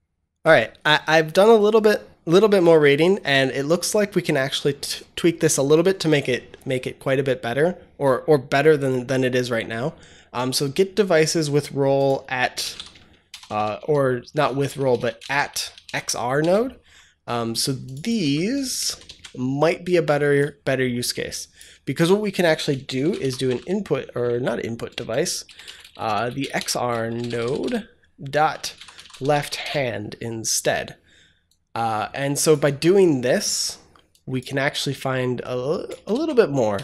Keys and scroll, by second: 12.3-13.2 typing, 14.9-16.2 typing, 16.3 Return, 18.1 ctrl+c, 18.8 ctrl+v, 22.7-23.9 typing, 25.4-29.9 typing, 32.5 ctrl+c, 35.8 ctrl+v, 36.0 ctrl+s, 36.7 BackSpace.